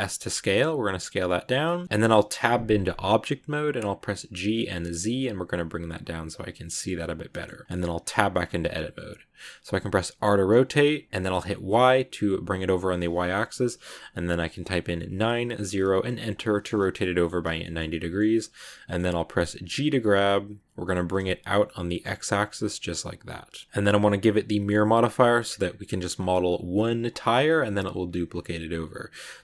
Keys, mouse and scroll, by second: 0.2 s, 1.7 shift+middle click, 2.3 Tab, 7.2 shift+middle click, 7.9 Tab, 8.3 scroll up 2, 10.0 r, 16.9-19.4 middle drag, 19.4 scroll down 1, 19.7 g, 23.7-26.1 middle drag.